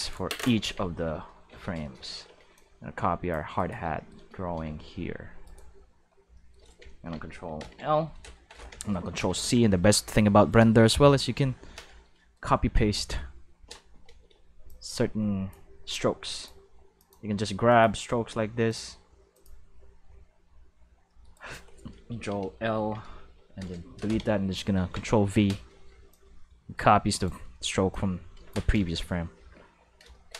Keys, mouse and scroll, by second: 0.6 Tab, 1.5 alt+a, 2.0 c, 2.5-3.3 drag, 3.5 right click, 4.6 c, 5.4 right click, 5.6 right click, 7.5 ctrl+l, 9.1 ctrl+c, 9.2 ctrl+c, 9.4 ctrl+c, 12.9-14.6 middle drag, 14.1 c, 14.6-15.5 drag, 16.3 click, 16.9 click, 17.6 click, 18.6 click, 19.3 click, 21.3 right click, 22.7 ctrl+l, 23.2 x, 23.5 Return, 24.8 ctrl+v, 26.1-27.2 drag, 27.9-28.5 drag, 30.2 shift+middle click.